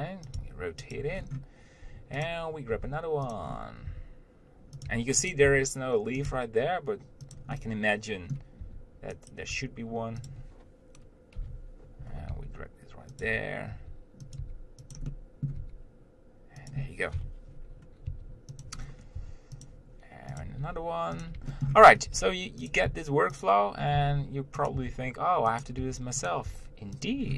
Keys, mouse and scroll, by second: 0.0 r, 0.6 g, 1.4-2.3 scroll down 1, 2.5 click, 3.0 g, 3.7 scroll up 1, 4.1 r, 5.1 g, 5.7 r, 6.5 g, 7.8-8.8 middle drag, 8.8 r, 9.8 Tab, 10.5 click, 11.6 ctrl+l, 12.5 g, 13.5 Tab, 14.0 r, 14.6 g, 15.4 middle click, 15.8 g, 18.3 r, 19.0 scroll down 1, 19.4 r, 20.6 click, 20.8 g, 21.7 shift+middle click, 22.0-22.4 scroll up 1, 22.4 g, 23.1 s, 24.3 g, 25.0 r, 26.0 g, 26.7 r.